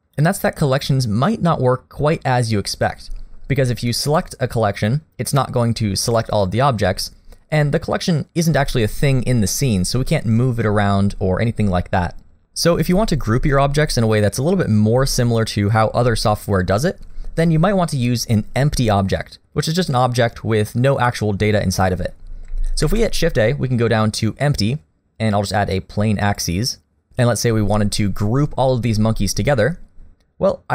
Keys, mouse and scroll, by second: 4.1 click, 22.9 shift+a.